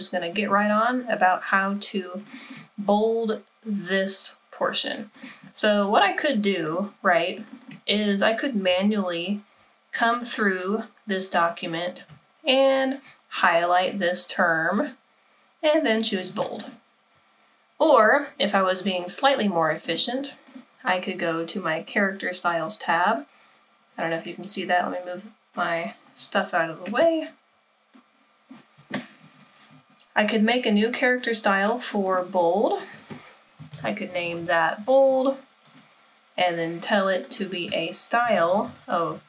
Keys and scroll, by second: 33.5-34.9 typing, 38.0-39.2 typing.